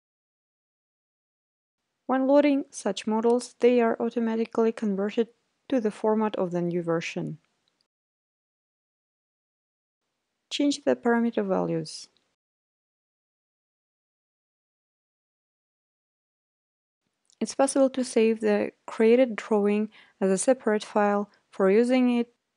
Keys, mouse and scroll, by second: 5.1-6.2 drag, 6.7-7.8 drag, 10.1-11.3 drag, 13.0 click, 19.8-21.0 drag, 21.5-22.5 drag.